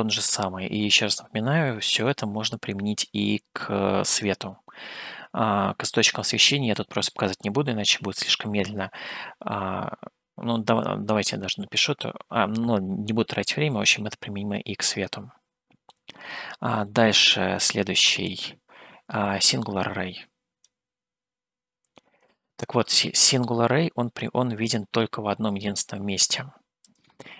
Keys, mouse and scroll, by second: 15.3 middle click, 18.7-21.1 drag, 22.4 scroll down 1, 23.1 scroll down 1, 27.1 click.